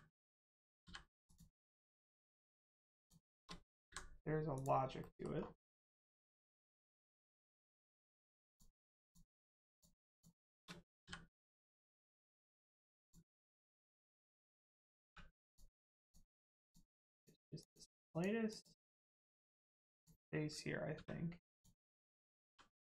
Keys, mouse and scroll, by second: 0.5 right click, 0.8 m, 1.2 click, 1.7 middle click, 2.5 click, 2.9 shift+click, 3.8 m, 4.5 click, 5.0 middle click, 5.3-5.9 scroll down 1, 6.0 middle click, 6.2 shift+middle click, 6.5 scroll up 1, 7.1 middle click, 7.4 shift+middle click, 7.7-8.4 shift+scroll up 2, 8.4 click, 10.0 shift+click, 11.0 click, 11.6 click, 13.3 middle click, 13.7 shift+middle click, 15.0 middle click, 15.4 click, 17.5 click, 19.1 middle click, 19.8 click, 20.9 1, 21.4 click, 22.4 g.